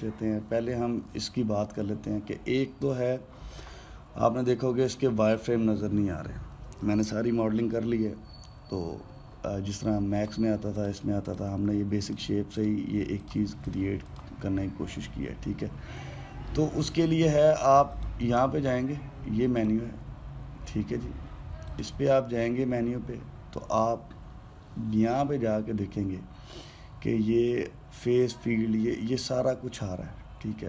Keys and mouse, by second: 3.3-6.0 middle drag, 6.0 click, 10.9 click, 11.5 click, 12.0 drag, 12.7 drag, 13.3 click, 13.9 click, 14.4 click, 14.8 click, 18.6-20.5 drag, 22.4 click.